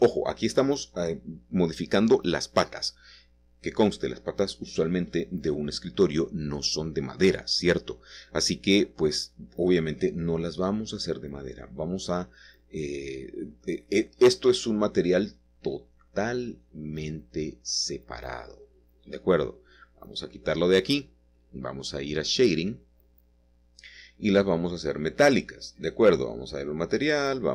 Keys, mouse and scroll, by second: 1.7-2.9 shift+middle drag, 3.2-5.0 shift+middle drag, 5.5 ctrl+middle click, 6.9-8.2 middle drag, 8.3 shift+click, 11.4-13.1 scroll down 6, 13.1-15.4 middle drag, 15.8-18.2 scroll up 3, 16.5-17.7 shift+middle drag, 17.8 middle click, 19.4 click, 23.0 click, 26.5 click.